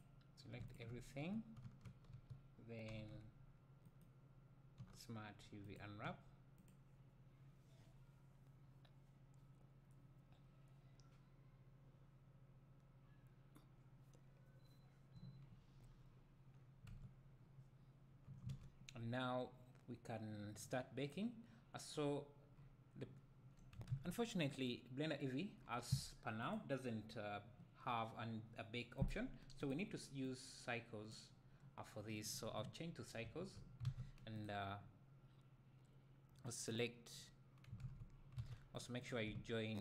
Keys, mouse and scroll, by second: 0.6 click, 0.7 shift+click, 1.8 Tab, 2.2 a, 3.0 i, 4.0 right click, 17.0 Tab, 21.2 s, 21.9-22.5 scroll up 2, 22.5-23.0 scroll down 2, 23.0 `, 31.5-34.5 drag, 33.9 alt+a, 36.8 click, 39.1 a, 39.1 click.